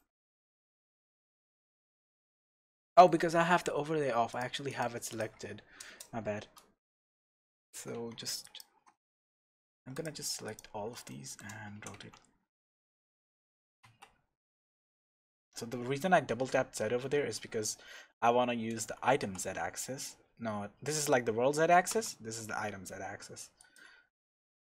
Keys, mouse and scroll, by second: 0.0-4.3 middle drag, 0.5-1.1 scroll down 2, 1.1 scroll up 1, 1.9 scroll down 1, 2.0 scroll up 1, 4.3 click, 5.1 click, 5.8 KP_0, 6.4-6.8 scroll up 1, 7.3 Tab, 7.8 alt+a, 8.4 alt+shift+click, 9.9 alt+shift+click, 10.5 alt+shift+click, 11.1-23.7 shift+middle drag, 11.7 e, 23.7 click, 24.1-24.5 scroll down 2, 24.5 Tab.